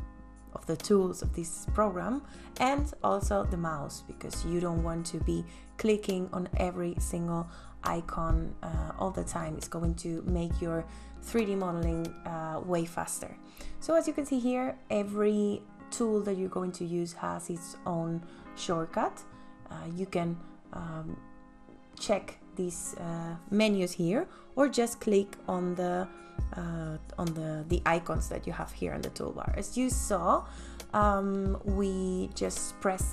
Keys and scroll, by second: 24.7 space.